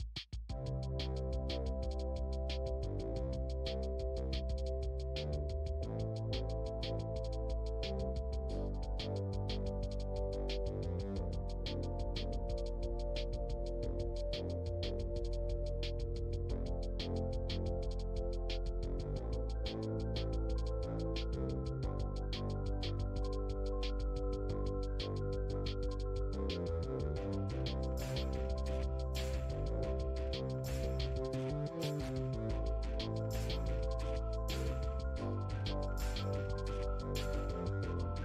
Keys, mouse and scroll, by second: 0.6 middle click, 1.0 f, 1.7-3.0 ctrl+drag, 3.0-4.3 middle drag, 4.3 space, 4.7 f, 5.3-7.6 drag, 7.6 middle click, 8.1-9.6 drag, 9.6 middle click, 10.0 click, 10.9-12.1 middle drag, 12.1 space, 12.6 f, 13.1-15.3 drag, 15.3 middle click, 15.9 f, 16.8 f, 18.5-21.0 drag, 21.0 middle click, 21.5-22.6 drag, 22.6 middle click, 23.0 click, 23.9-25.1 middle drag, 25.1 f, 25.6-27.6 drag, 27.6 middle click, 28.3-30.3 drag, 30.3 middle click, 31.0-35.3 drag, 35.3 middle click, 35.7-37.1 drag, 37.1 middle click, 37.5-38.2 drag.